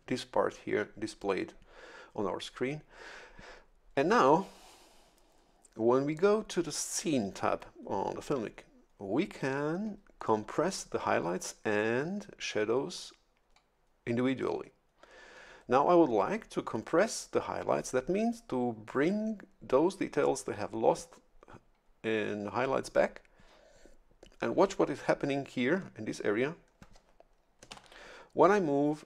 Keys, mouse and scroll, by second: 27.7 shift+F11.